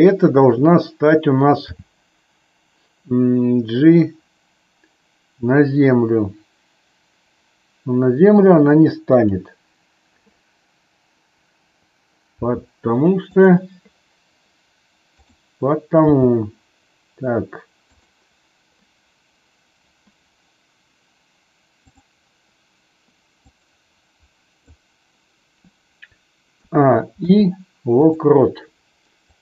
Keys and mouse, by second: 1.6 g, 12.2 r, 13.2 click, 15.1 click, 16.0 g, 17.9 click, 21.7-22.5 drag, 23.5-24.7 drag, 26.5 a, 27.1 i, 29.3-29.4 drag.